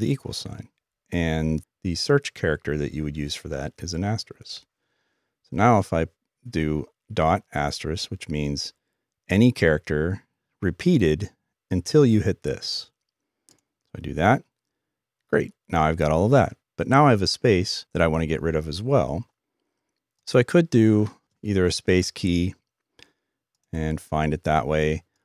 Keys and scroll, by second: 4.5-5.2 typing.